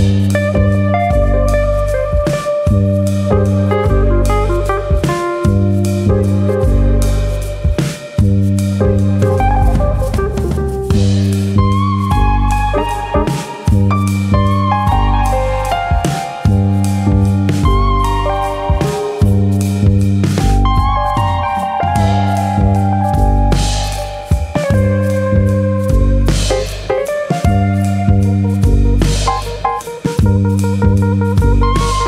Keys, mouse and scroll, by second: 1.4-2.1 scroll up 3, 1.8 shift+middle click, 2.1 middle click, 2.9 KP_1, 4.0 shift+middle click, 4.4 click, 4.6 Tab, 6.0 click, 6.7 ctrl+KP_Add, 7.3 KP_3, 7.9 scroll up 1, 8.2 shift+middle click, 9.5 middle click, 11.1 click, 13.0 KP_3, 14.0 e, 14.9 click, 16.4 click, 19.9 click, 20.2 e, 24.8 click, 25.1 middle click, 25.5 scroll up 3, 25.7 shift+middle click, 25.9 middle click, 26.6 alt+click, 26.8 middle click, 27.7 g, 28.9 click, 29.0 g, 30.6 click, 30.9 middle click, 31.3 alt+click.